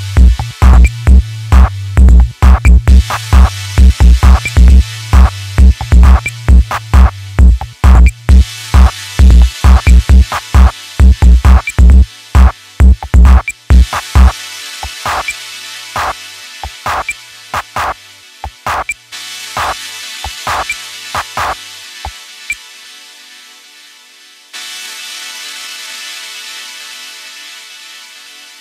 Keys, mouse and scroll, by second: 3.5-3.8 scroll down 1, 3.8 Tab, 4.4 scroll up 2, 4.7-5.4 middle drag, 5.4 alt+z, 5.6 scroll down 2, 5.9-6.3 middle drag, 6.3 KP_3, 6.6-7.2 scroll down 2, 7.2 KP_1, 7.9-8.2 scroll up 4, 8.2-9.0 shift+middle drag, 9.0-9.9 scroll up 1, 9.9-10.4 shift+middle drag, 10.4-10.8 scroll down 2, 10.8-11.2 shift+middle drag, 11.2 scroll up 1, 11.5 Tab, 12.9 click, 13.7 click, 16.6 click, 17.4 ctrl+shift+click, 17.9 scroll up 1, 18.0-19.2 middle drag, 19.2-19.5 scroll down 2, 19.5-20.8 shift+middle drag, 22.1-23.1 middle drag, 23.1 e, 24.6 KP_1, 25.2 scroll down 1, 25.4 Tab, 25.7-26.2 scroll down 1, 26.2-27.2 shift+middle drag, 27.2-27.5 scroll up 1, 27.5 Tab, 28.0-28.6 shift+middle drag.